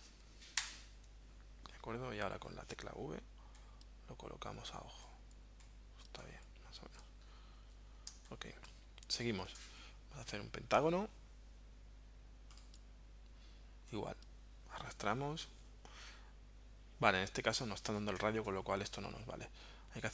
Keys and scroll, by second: 0.0-0.5 typing, 0.7 Return, 2.7 v, 8.1 space, 18.4 BackSpace.